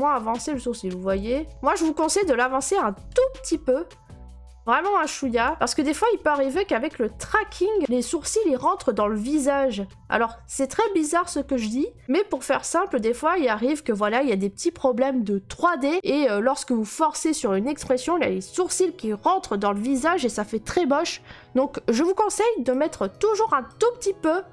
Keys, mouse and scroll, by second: 2.2 middle click, 5.4 click, 5.8 right click, 10.6 middle click, 22.7 click, 23.7 right click.